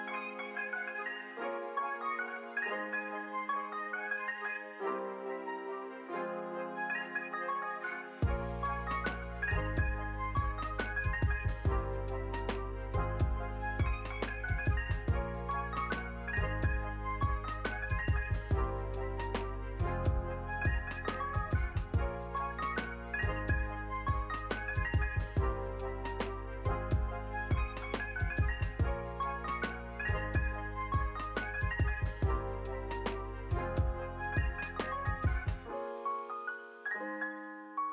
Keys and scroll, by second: 0.3 space, 17.8 space, 20.5 ctrl+c, 21.3 ctrl+v, 21.7 space, 28.9 space, 29.2 ctrl+s.